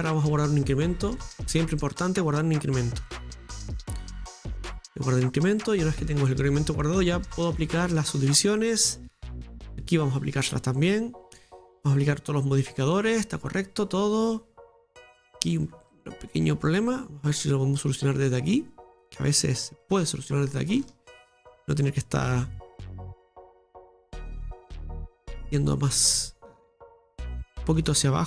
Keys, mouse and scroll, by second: 1.4 scroll down 1, 1.4 click, 4.5 click, 5.4-5.7 scroll up 2, 5.7-8.1 middle drag, 9.0 click, 9.1 right click, 9.6 right click, 10.8-12.5 drag, 12.5 scroll down 2, 12.7-15.7 middle drag, 15.7-16.3 scroll up 2, 16.3 middle click, 16.7 right click, 17.0 Tab, 17.5-19.8 scroll up 2, 19.8 right click, 20.5-20.8 scroll down 2, 20.8-22.9 shift+middle drag, 22.9-26.1 drag, 26.1 right click, 26.9 shift+right click, 27.2 middle click, 27.9 click.